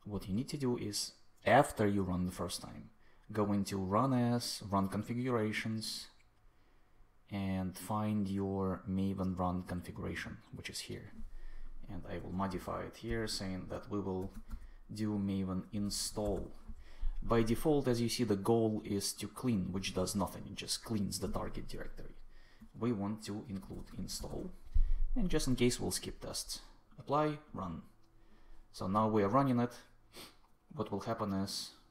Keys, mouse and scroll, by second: 12.1 space, 12.4 shift+9, 12.7 shift+0, 13.0 shift+Left, 13.5 Left, 13.9-16.7 typing, 22.5-24.6 typing.